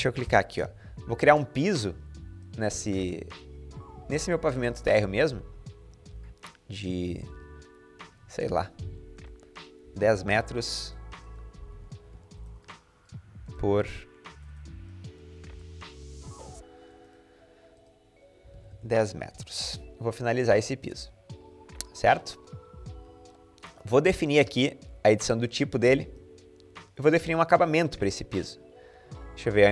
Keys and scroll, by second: 9.4-10.2 typing, 10.6 Escape, 11.4-14.0 typing, 18.2-19.4 typing, 18.5 Return.